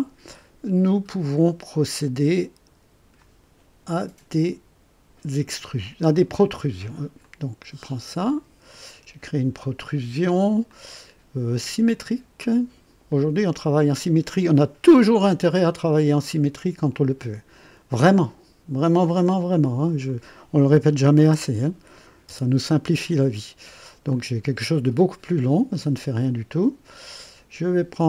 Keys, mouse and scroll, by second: 7.2 click, 8.7 click, 10.7 click, 13.0 click, 20.0 click, 21.2 KP_0, 22.3 Return, 24.1-26.4 drag.